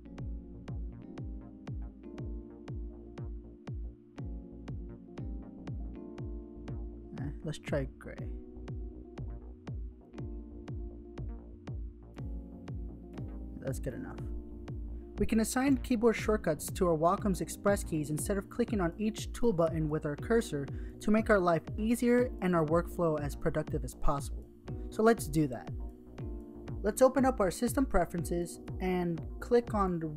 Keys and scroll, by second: 15.4 Tab.